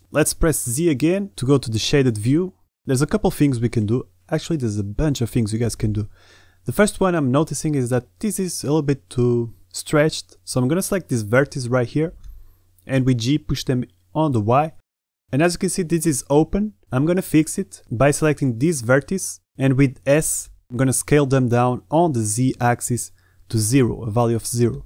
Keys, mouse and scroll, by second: 0.2 z, 0.6 middle click, 1.1 Tab, 1.8-2.5 drag, 3.1 drag, 4.3 Tab, 4.6 click, 5.4 click, 6.2 a, 6.6 b, 8.2 click, 8.6 g, 14.6 click, 14.8 middle click, 15.6 shift+middle click, 16.2 a, 17.7 alt+shift+middle click, 18.4 middle click, 19.7 s, 23.3-24.8 middle drag.